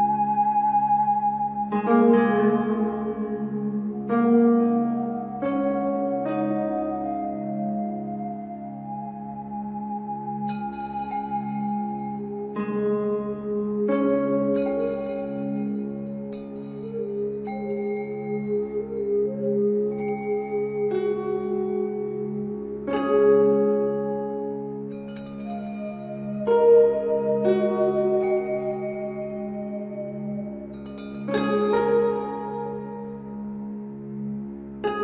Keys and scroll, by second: 20.9 3.